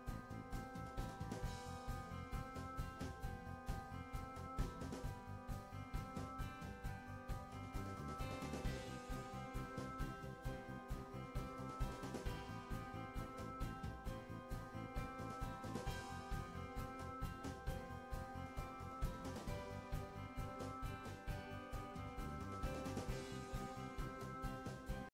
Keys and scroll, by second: 3.5 End, 6.9 Return, 16.8 Return.